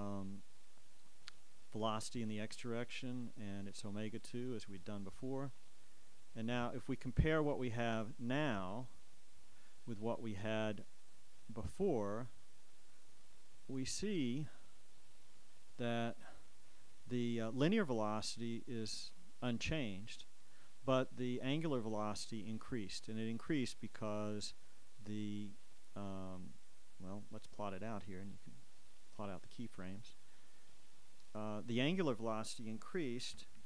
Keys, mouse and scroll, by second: 1.4 click, 3.1 click, 5.0 click, 9.6 click, 13.3-14.4 drag, 16.2 click, 25.3 click, 28.4-30.2 drag, 30.9 click.